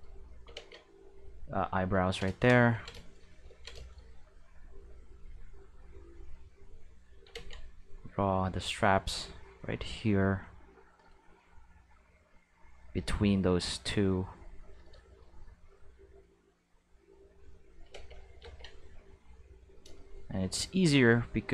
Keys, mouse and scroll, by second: 0.6 ctrl+z, 1.1 click, 2.7 ctrl+middle click, 4.5 click, 6.2 click, 7.3 ctrl+z, 7.8 click, 9.0 click, 10.4 click, 11.8 click, 13.4 click, 14.4 click, 15.7 click, 17.3 click, 17.9 ctrl+z, 18.4 ctrl+z, 19.2 click.